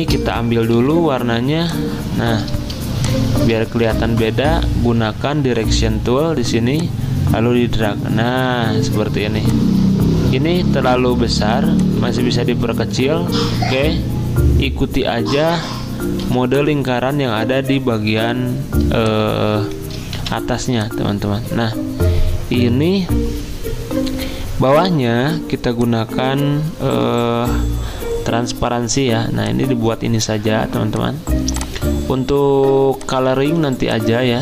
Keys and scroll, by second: 0.7 typing, 3.6-4.4 typing, 9.2 z, 10.8 v, 16.2 z, 20.1 v.